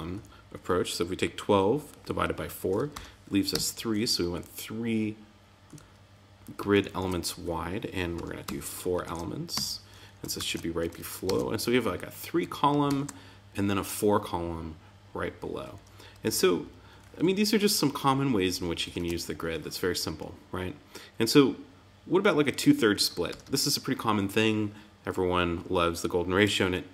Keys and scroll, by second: 0.1 Right, 6.7 alt+Right, 9.0 super+Right, 9.5 Tab, 10.3 super+s, 11.2 super+Tab, 12.8 super+r, 18.9 super+Tab, 20.1 Down, 22.9 Up, 23.2 Return.